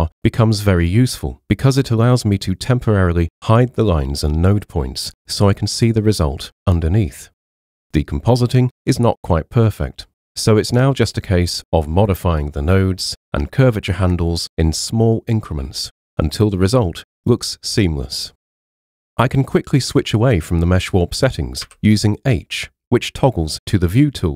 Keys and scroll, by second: 21.6 h.